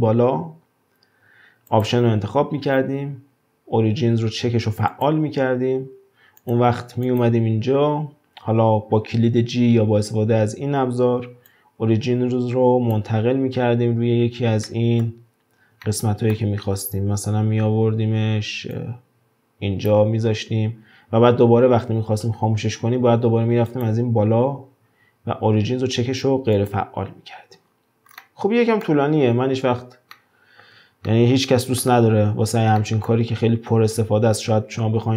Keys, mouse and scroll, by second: 1.7-4.7 drag, 6.4 click, 7.1 click, 11.5-14.5 drag, 14.7-15.3 middle drag, 15.3 scroll up 2, 15.8-18.7 shift+middle drag, 18.7-20.3 drag, 20.3-22.3 scroll down 2, 23.7-26.7 drag, 27.6-28.2 scroll down 4, 28.2-29.1 middle drag, 29.1-30.1 scroll up 1, 30.1-35.1 shift+middle drag.